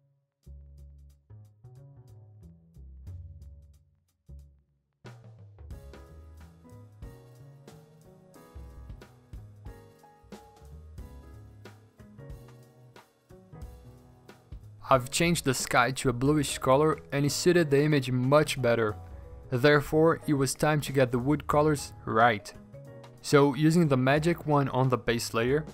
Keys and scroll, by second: 5.2 ctrl+z, 5.3 v, 6.9 p, 9.7-11.5 typing, 11.3 Return, 16.6-18.3 typing, 17.8 alt+BackSpace, 19.4-20.1 typing.